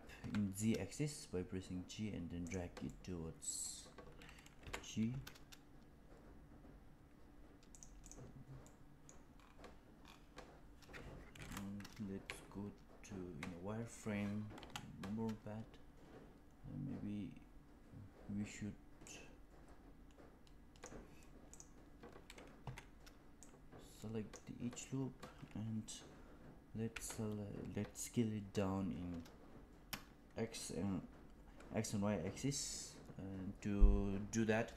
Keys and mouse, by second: 2.9 middle click, 4.5 g, 8.6 middle click, 12.1 z, 14.5 KP_1, 18.9-20.8 drag, 21.4 click, 22.5 2, 23.3 click, 27.3 s.